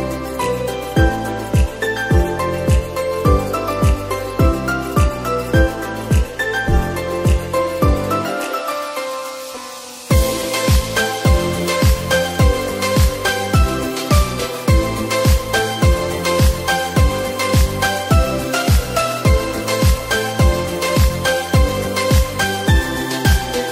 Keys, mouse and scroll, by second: 0.0 alt+shift+click, 0.7 ctrl+b, 2.4 Tab, 2.7-3.4 right drag, 3.4 middle click, 4.1 Tab, 4.3 scroll down 4, 4.5 Tab, 4.8 click, 5.2 middle click, 5.8 scroll up 3, 6.1 click, 6.7-8.1 middle drag, 8.1-10.4 drag, 10.4-11.0 middle drag, 11.0 s, 12.7-13.2 scroll up 2, 13.2 click, 14.9 Tab, 15.1 click, 15.5 Tab, 15.8 click, 16.2 middle click, 17.2 click, 18.6 click, 19.1-22.7 drag, 23.5-23.7 drag.